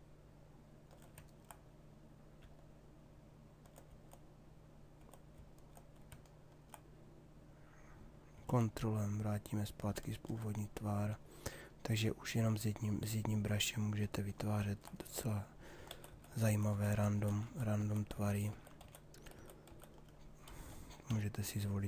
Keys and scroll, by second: 15.4 ctrl+z, 21.1 m.